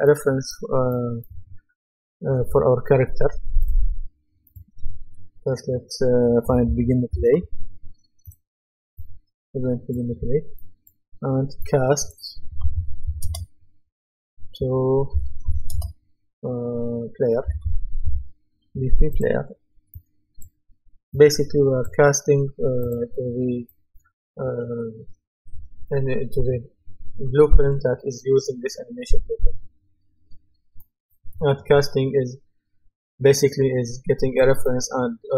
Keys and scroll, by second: 6.2-7.8 typing, 12.3-13.2 typing, 15.2-15.9 typing, 17.4-18.5 typing.